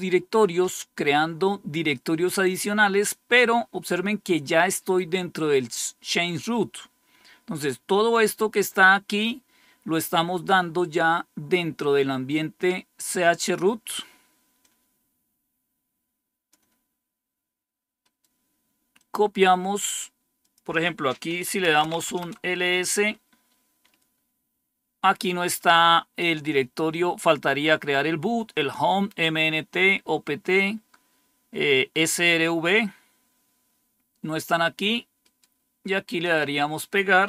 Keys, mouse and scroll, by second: 14.5-16.4 drag, 17.9 right click, 18.9 click, 20.3 click, 21.3-22.2 typing, 35.1 right click, 36.1 click.